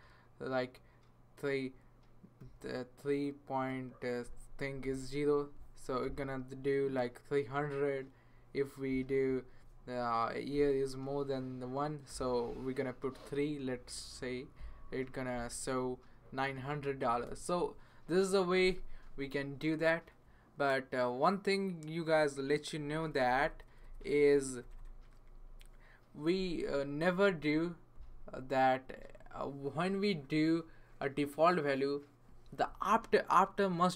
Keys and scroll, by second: 2.4 3, 4.2-5.3 typing, 10.5 ,, 12.1 typing.